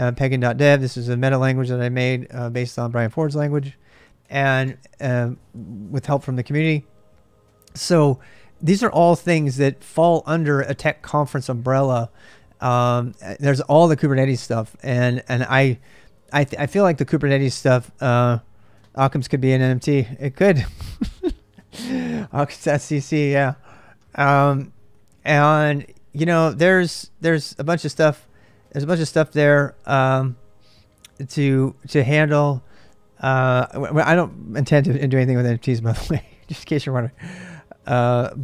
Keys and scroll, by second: 0.0-6.4 typing.